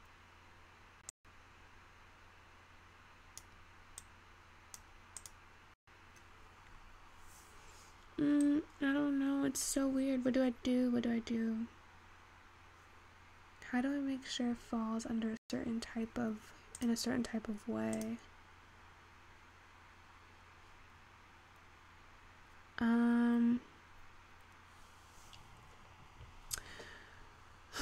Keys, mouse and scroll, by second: 8.9 click.